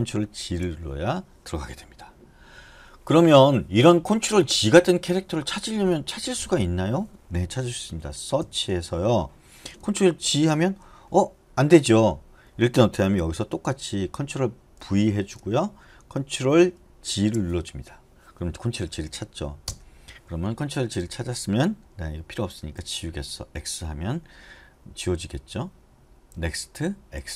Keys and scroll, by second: 0.6 ctrl+g, 2.7 Escape, 8.6 /, 10.4 ctrl+g, 14.9 ctrl+v, 17.3 ctrl+g, 19.9 shift+Return, 22.9 typing, 26.3-27.3 typing.